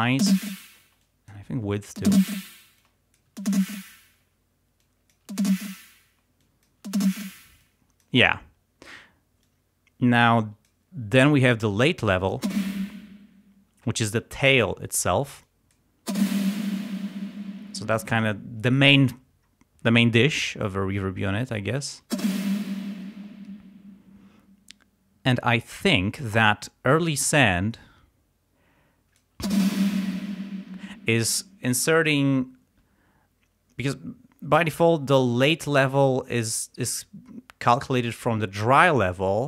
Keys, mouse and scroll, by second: 0.1 space, 0.8 space, 1.0 click, 2.0 space, 2.8 space, 2.8 click, 3.4 space, 4.8 click, 5.3 space, 6.1 space, 6.4 click, 6.9 space, 7.7 click, 9.5-10.9 drag, 11.3-12.3 drag, 12.4 space, 13.7 space, 15.5 click, 16.0 space, 17.6 space, 17.8 click, 20.0 click, 22.1 space, 27.3-29.4 drag, 29.4 space, 30.8 space.